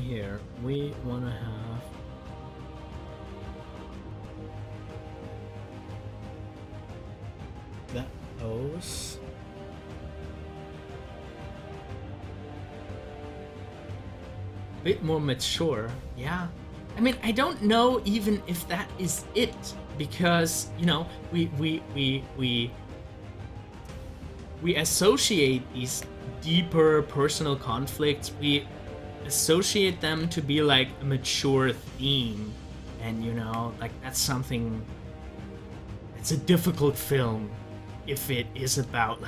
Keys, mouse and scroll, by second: 0.1 scroll down 1, 0.8 scroll up 1, 10.0-13.2 drag, 13.2 ctrl+z.